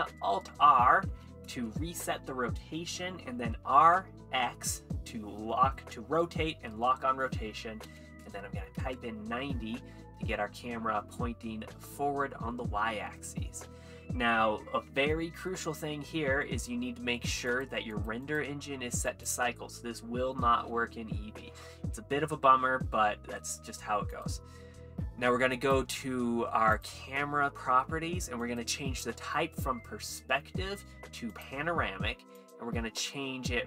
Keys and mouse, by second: 0.1 alt+r, 1.8 r, 1.8 x, 7.9 KP_9, 8.4 KP_0, 8.8 KP_Enter, 11.5-11.8 middle drag, 17.5 click, 18.3-19.3 drag, 24.1 click, 25.6 click, 28.4-31.5 drag, 32.4-33.6 drag.